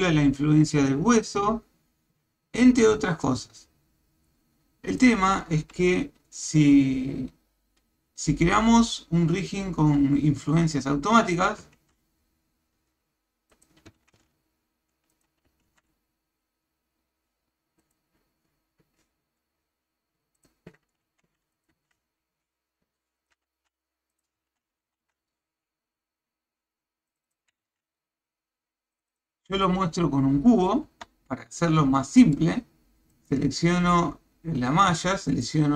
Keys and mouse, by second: 11.8 shift+a, 13.9 g, 15.7 shift+a, 20.4 click, 21.1 Tab, 21.5 click, 21.7 g, 23.5 Tab, 24.1 click, 24.4 Tab, 24.9 ctrl+r, 30.9 Tab, 31.9-32.4 shift+middle drag.